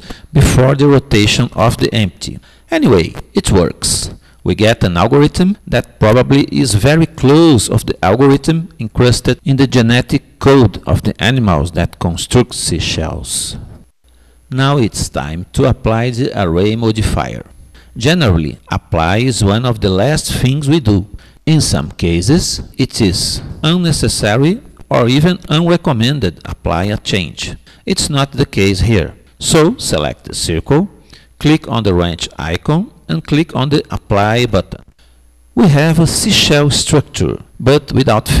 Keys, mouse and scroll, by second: 30.2-31.9 drag, 32.0 click, 33.6-35.3 drag.